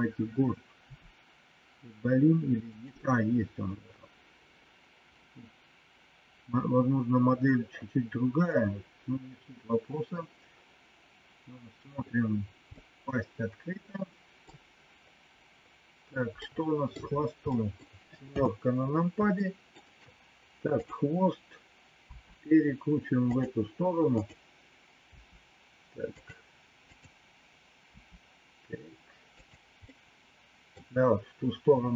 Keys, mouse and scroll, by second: 0.8 r, 12.8-14.4 middle drag, 16.4 middle click, 17.6 middle click, 18.3 KP_7, 19.3 shift+middle click, 20.8 click, 22.0 r, 24.2 click, 26.9 click, 27.9 r, 29.8 middle click.